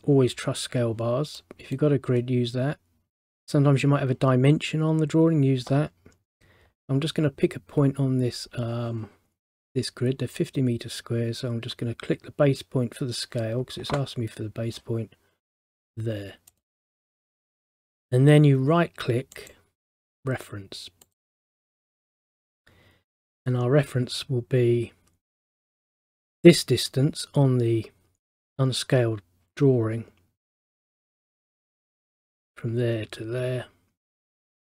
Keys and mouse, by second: 1.5 middle click, 16.6 click, 19.5 right click, 21.2 click, 32.2 click.